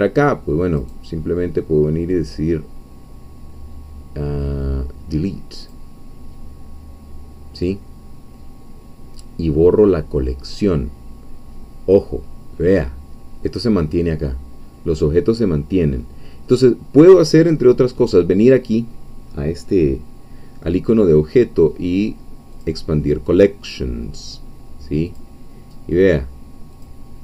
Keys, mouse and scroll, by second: 0.8 right click, 5.6 click, 10.7-12.7 scroll down 2, 22.5 click, 25.1 click, 26.8 click.